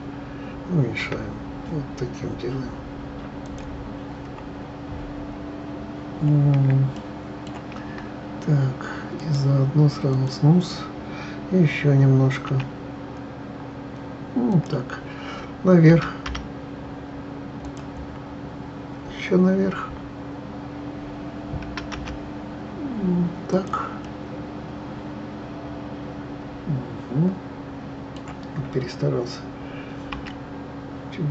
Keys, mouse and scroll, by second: 1.0 s, 3.7 scroll down 1, 4.0-5.2 scroll up 7, 6.1 scroll down 2, 6.9-7.8 shift+middle drag, 7.8-9.2 scroll up 4, 9.2-12.2 right drag, 12.5 s, 15.9 g, 18.0-18.4 scroll down 6, 18.9-19.3 scroll down 1, 21.6 g, 24.0-27.1 middle drag, 30.1 s.